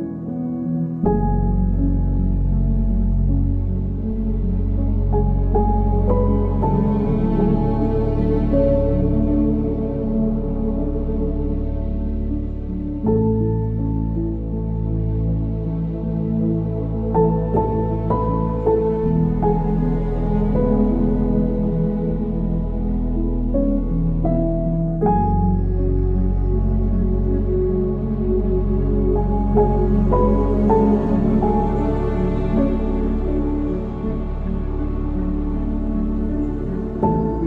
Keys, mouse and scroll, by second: 0.2 ctrl+s, 0.8-1.5 drag, 1.5 middle click, 2.3-3.7 drag, 7.8 click, 12.9-15.1 drag, 26.1-27.3 drag, 27.8 click, 29.1 click, 29.8-32.5 drag, 33.5-35.2 drag, 35.2 KP_Decimal, 36.5 click.